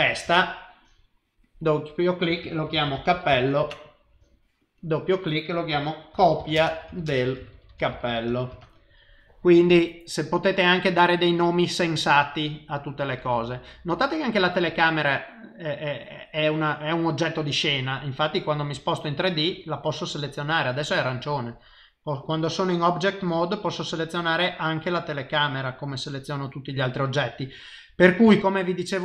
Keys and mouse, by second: 1.4 click, 1.6 click, 2.7 p, 3.1 l, 4.6 click, 4.8 click, 7.7 p, 7.8 l, 9.8 click, 10.2 click, 14.6 click, 18.1 middle click, 18.8 ctrl+middle click, 21.2 click, 22.6 click, 23.8 click, 24.5 click, 24.9 click, 25.9 click, 28.8 shift+middle click, 28.9 middle click.